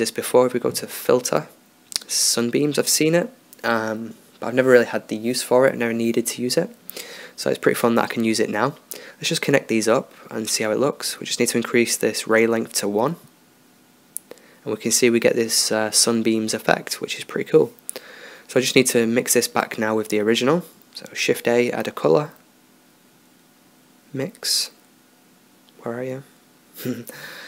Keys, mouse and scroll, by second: 7.0-7.8 drag, 9.9-10.4 drag, 11.5-15.9 drag, 16.8-19.1 drag, 20.5 shift+a.